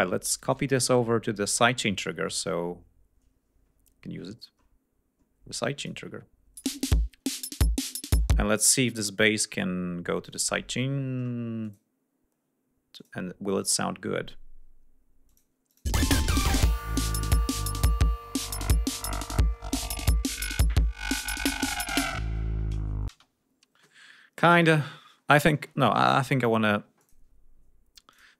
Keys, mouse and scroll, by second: 1.4-2.5 ctrl+drag, 4.6 click, 5.6 scroll up 2, 5.8 click, 6.6 space, 7.2-8.0 ctrl+scroll down 5, 8.2 space, 8.5-8.8 scroll down 1, 8.8-9.8 scroll up 2, 10.3 click, 11.7 click, 13.0 click, 13.6 scroll up 2, 15.3 click, 15.7 click, 15.9 space, 16.4 ctrl+scroll down 2, 23.2 space, 23.4-24.0 scroll up 2, 25.2-25.7 scroll down 2, 26.2-26.6 scroll up 2, 27.0 click, 28.2 click.